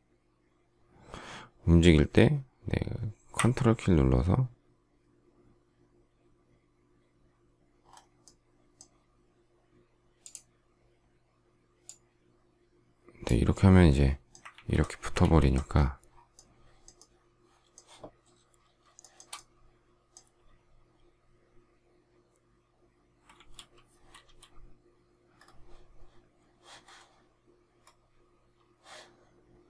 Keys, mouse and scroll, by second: 14.5 ctrl+z, 15.2 ctrl+z, 18.9 shift+middle click, 23.2 alt+f.